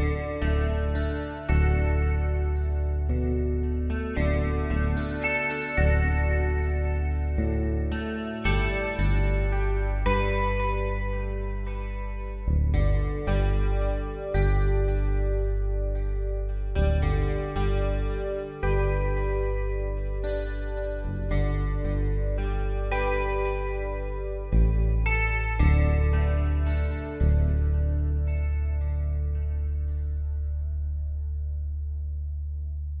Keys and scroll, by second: 13.8 ctrl+z, 14.4 shift+F6, 20.7 Return, 26.4 ctrl+shift+], 29.2 ctrl+t.